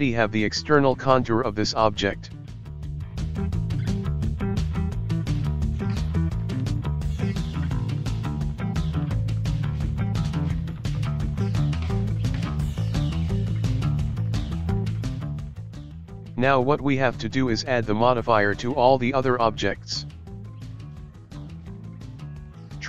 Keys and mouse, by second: 0.0-7.3 middle drag, 7.3 click, 9.7-11.5 middle drag, 11.5 right click, 13.8-16.3 drag, 16.8-18.6 drag, 18.6 right click, 19.0 click, 21.4 right click, 21.6 right click, 21.9 right click.